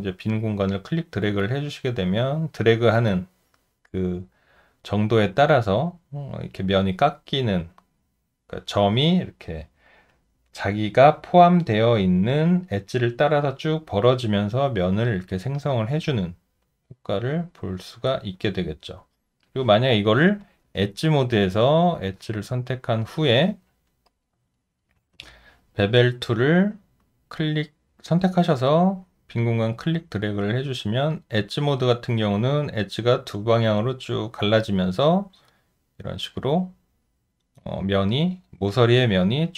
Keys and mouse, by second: 16.0 alt+click, 23.6 alt+middle click, 24.3 alt+right click, 25.1 space.